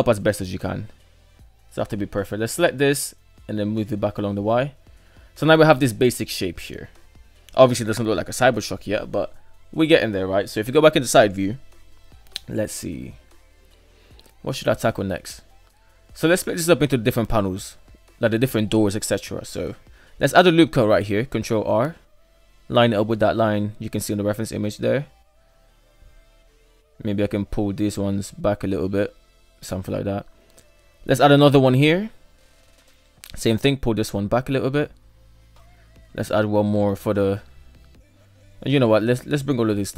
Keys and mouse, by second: 0.8 right click, 2.1 g, 4.3 shift+middle click, 4.5 Tab, 5.0 alt+z, 5.3 middle drag, 5.6-8.5 middle drag, 8.9 KP_3, 11.3 alt+z, 12.2 shift+middle click, 13.2 shift+middle drag, 14.3 shift+middle drag, 14.5 shift+middle drag, 19.1 Tab, 20.3 ctrl+r, 23.2 shift+middle click, 24.3 shift+middle click, 25.0 g, 26.5 right click, 27.4 g, 29.2 shift+middle click, 29.4 shift+middle drag, 30.0 shift+middle click, 31.1 ctrl+r, 32.7 right click, 33.1 g, 35.5-36.6 shift+middle drag, 37.1 right drag, 37.6 shift+right click, 38.1 shift+right click, 39.2 g.